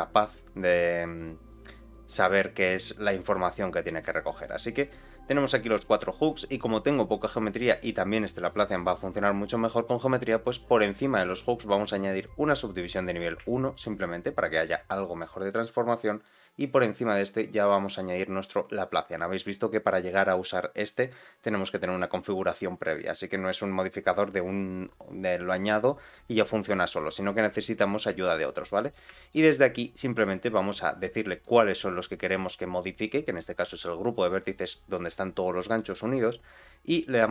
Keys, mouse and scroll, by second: 7.2-9.3 scroll up 1, 11.4-12.7 drag, 13.4 shift+middle click, 14.3 middle click, 14.9 shift+middle click, 16.2 click, 17.0-26.9 drag, 27.6-28.0 scroll down 1, 28.2 shift+middle click, 28.6 middle click, 29.1 shift+middle click, 31.3-36.2 drag.